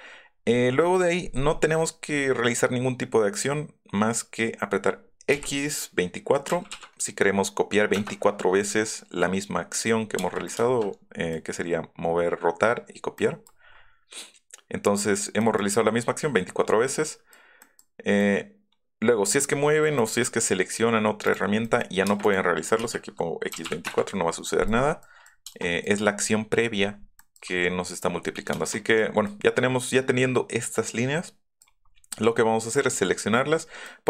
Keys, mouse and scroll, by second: 5.3 x, 6.5 KP_2, 6.7 KP_5, 9.7 click, 10.4 shift+click, 10.9 Up, 13.1-13.8 scroll up 2, 15.2 y, 17.0 middle click, 17.3 middle click, 17.7 middle click, 19.3 middle click, 20.1 middle click, 21.3 click, 21.6 middle click, 22.1 space, 22.2 click, 22.8 x, 23.5 KP_2, 23.6 KP_5, 23.8 Return, 24.4 middle click, 24.6-25.0 scroll down 1, 25.2 middle click, 25.8-27.4 middle drag, 28.5 shift+middle click, 31.7-32.7 middle drag, 32.9 middle click, 33.3 middle click.